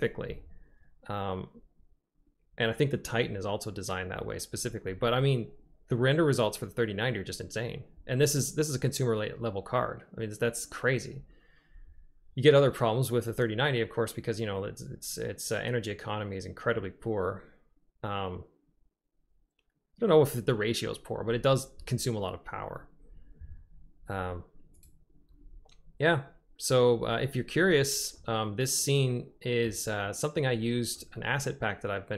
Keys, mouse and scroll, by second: 28.3-29.8 drag, 31.0-31.6 drag, 31.6-32.1 middle drag.